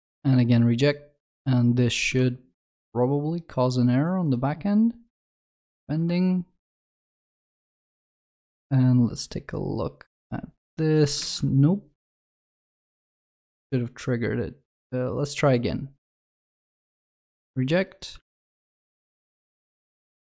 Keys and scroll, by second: 7.3 alt+F12.